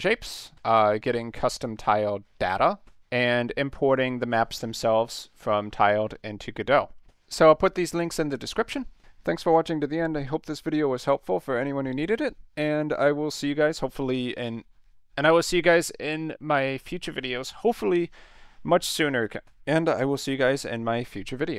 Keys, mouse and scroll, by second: 2.8-3.2 drag.